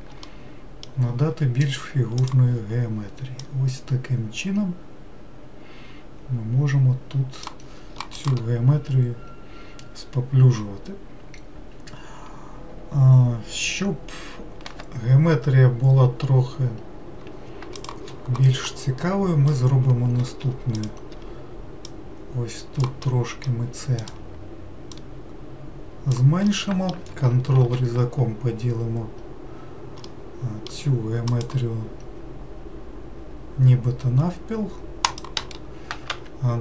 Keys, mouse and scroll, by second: 0.2-2.2 middle drag, 2.2-3.5 drag, 18.6-20.4 middle drag, 20.4 3, 20.8 click, 21.9 click, 23.0 middle click, 24.0 click, 24.9 click, 26.5-27.6 middle drag, 27.6 ctrl+r, 35.4-36.6 right drag.